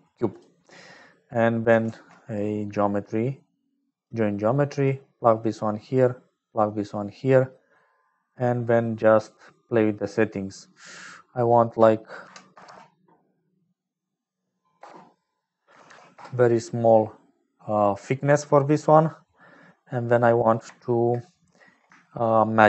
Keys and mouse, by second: 0.9 click, 1.8 shift+a, 5.9-7.7 drag, 7.7 middle click, 11.3-17.6 drag, 12.6 KP_0, 17.7 middle click, 20.0 click, 21.4 middle click, 22.0 shift+click.